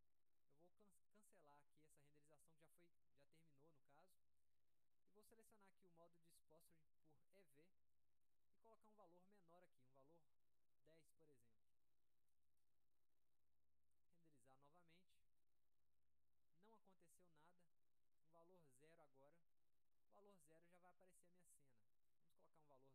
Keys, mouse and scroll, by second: 3.0 click, 6.7 click, 7.8 click, 11.3 click, 14.5 click, 18.4 right click, 21.9 click.